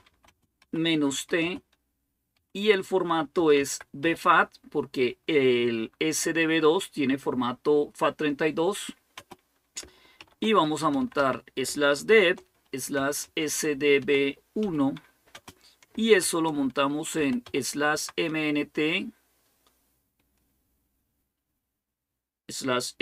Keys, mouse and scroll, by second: 0.0-4.3 typing, 9.0 space, 10.0-17.3 typing, 17.7 Tab.